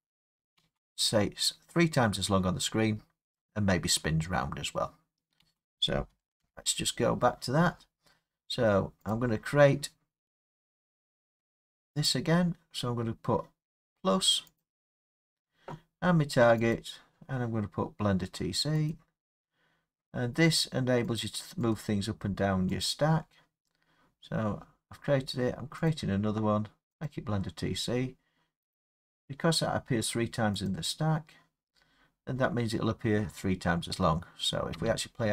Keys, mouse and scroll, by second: 0.6 space, 5.4 space, 6.4 Left, 9.1 click, 12.1 click, 14.6 click, 16.8 click, 18.9 click, 21.2 click, 21.8 click, 22.8 click, 25.9 click, 27.1 click, 28.8 click, 34.8 space.